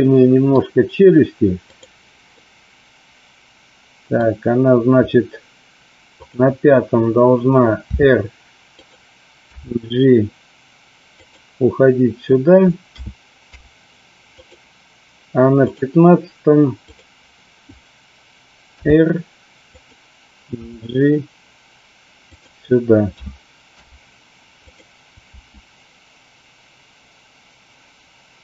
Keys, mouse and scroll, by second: 1.6 click, 2.4-4.2 middle drag, 6.1 click, 8.7 click, 9.4 g, 11.2 click, 13.4 i, 19.7 click, 20.7 g, 22.3 click, 23.0 a, 23.7 i, 25.3 space.